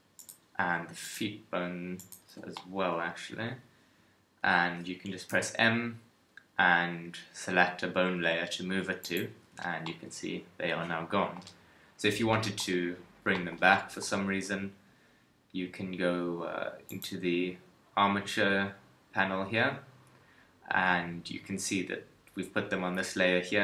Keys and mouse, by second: 5.3 m.